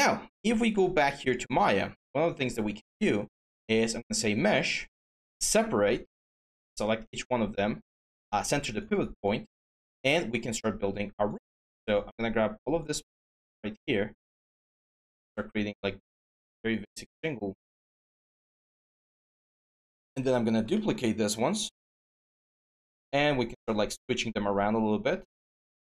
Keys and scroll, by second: 9.7 w, 19.8 ctrl+d.